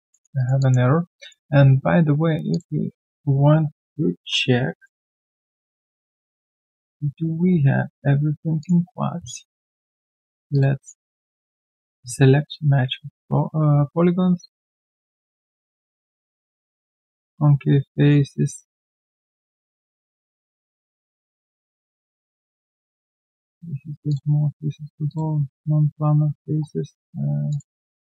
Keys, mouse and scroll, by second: 0.3 alt+right click, 0.6 alt+click, 0.8-1.1 alt+scroll down 1, 1.1 alt+click, 12.5-13.0 scroll down 1, 25.7-26.5 scroll down 1, 26.5-27.6 scroll down 1, 27.8-28.1 scroll down 1.